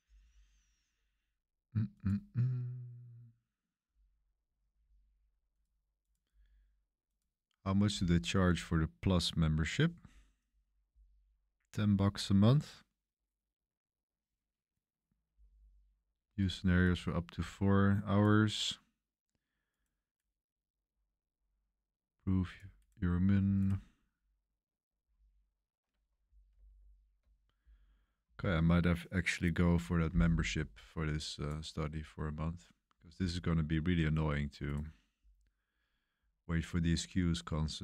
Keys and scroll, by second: 26.5 super+=, 26.7 super+=.